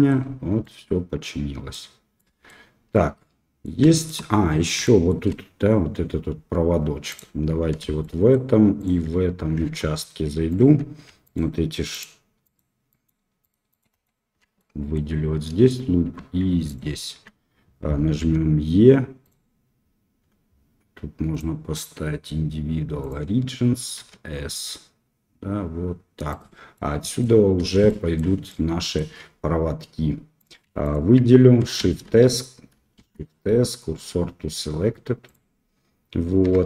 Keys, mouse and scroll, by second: 0.6-1.3 middle drag, 1.3-1.7 drag, 2.1 middle drag, 2.9-3.6 middle drag, 3.9 shift+middle drag, 4.9 shift+middle click, 7.1 click, 8.0 shift+click, 8.7 shift+click, 9.6 Tab, 12.9 alt+click, 13.4 alt+click, 13.7 alt+click, 13.9 alt+click, 14.5 middle click, 16.6 alt+shift+click, 18.2 e, 21.3-23.0 drag, 23.9 s, 26.7 middle click, 27.8 shift+middle click, 28.4 middle click, 30.3 click, 31.8 shift+s, 33.0 shift+s, 36.4 Tab.